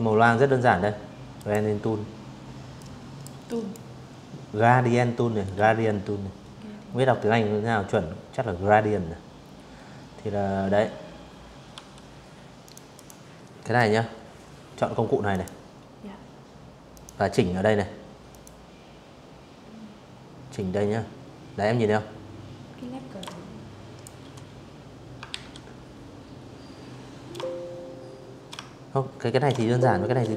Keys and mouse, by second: 0.4 click, 1.1 click, 9.4 v, 10.3 click, 10.6 click, 13.0 click, 14.6 click, 16.0 click, 20.9 shift+click, 22.9 ctrl+z, 25.0-29.7 shift+drag.